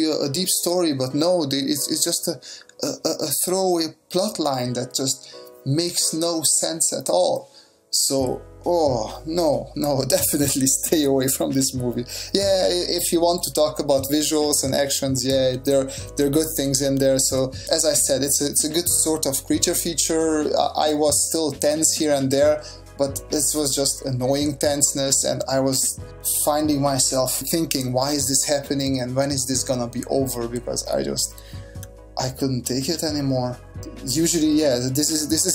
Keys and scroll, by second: 9.1 s, 17.2 s, 19.8 s, 31.5 s, 34.7 s.